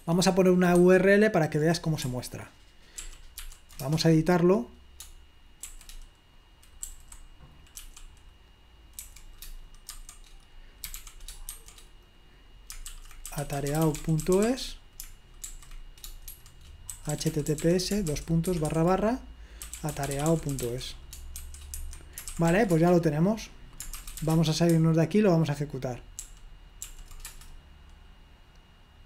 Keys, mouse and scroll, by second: 0.0 super+2, 0.9 super+1, 3.0 ctrl+p, 3.4 ctrl+p, 3.9 Return, 5.7 g, 7.0 y, 7.9 p, 9.2 f, 11.6-12.3 typing, 14.9 typing, 16.1 typing, 19.4 typing, 20.5 typing, 25.7-26.4 typing, 26.5 ctrl+p.